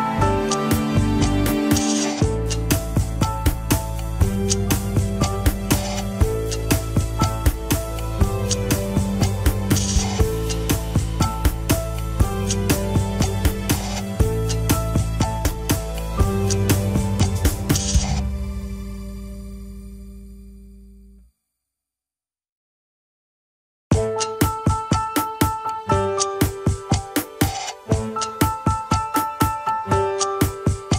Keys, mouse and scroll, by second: 3.5 scroll up 3, 4.0-5.2 shift+middle drag, 5.2-5.6 scroll up 4, 5.6-6.2 shift+middle drag, 6.2 drag, 8.0 ctrl+l, 8.8 shift+click, 9.8 shift+click, 10.4-10.7 scroll down 7, 11.1-11.8 shift+middle drag, 11.8-12.6 scroll down 5, 12.6-13.7 shift+middle drag, 13.7-14.4 scroll down 3, 14.4-15.2 shift+middle drag, 15.2-16.0 scroll up 3, 15.4 KP_1, 16.0 shift+middle click, 16.7 scroll up 2, 17.2-19.8 shift+middle drag, 22.9 KP_3, 23.7 shift+middle click, 24.6 shift+click, 28.2 shift+click, 28.8 KP_1.